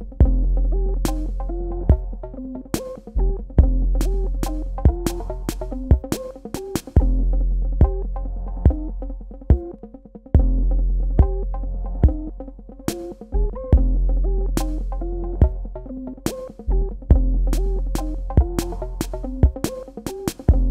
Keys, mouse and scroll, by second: 0.6 click, 3.7 click, 12.4 click, 19.6 shift+Num_Lock, 20.3-20.7 typing.